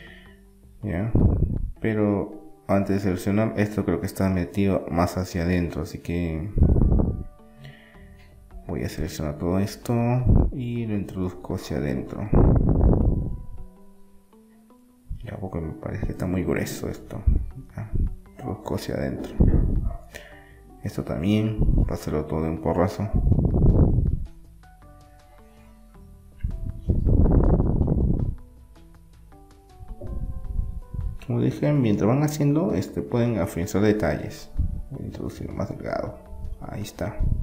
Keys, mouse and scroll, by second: 1.8-4.1 middle drag, 4.1 click, 4.9 click, 5.5 click, 5.9-7.6 middle drag, 7.6 click, 10.2-11.2 drag, 11.2 middle click, 11.9 KP_1, 12.2-13.2 middle drag, 13.2 KP_3, 13.9-15.9 middle drag, 18.2-19.9 middle drag, 19.9-24.2 right drag, 24.2-28.2 middle drag, 26.2-27.3 alt+shift+scroll, 28.2-31.2 drag, 31.6 KP_3, 32.2-33.6 middle drag, 33.6-35.2 drag.